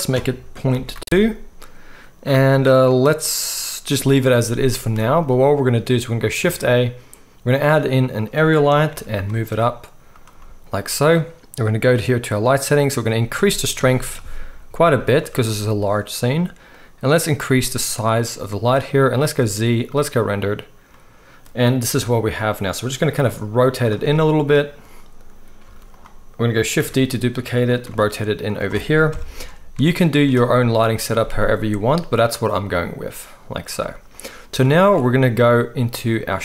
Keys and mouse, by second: 1.2 middle click, 1.4-4.9 middle drag, 4.9 z, 6.4-10.1 shift+drag, 6.4-10.1 shift+middle drag, 6.4-10.4 shift+right drag, 6.4 shift+a, 8.9 g, 10.4-17.4 drag, 12.9-17.4 middle drag, 12.9-17.4 right drag, 18.8-20.1 drag, 18.8-20.1 middle drag, 18.8-20.1 right drag, 19.4 z, 20.6 click, 20.6-22.9 middle drag, 20.6 right click, 21.9 g, 22.9-30.9 drag, 23.1 r, 25.6 z, 26.8 shift+d, 27.8 r, 29.1 KP_0, 29.7 z, 30.9-34.9 right drag, 33.8 z, 34.8 ctrl+s, 34.9-36.4 drag.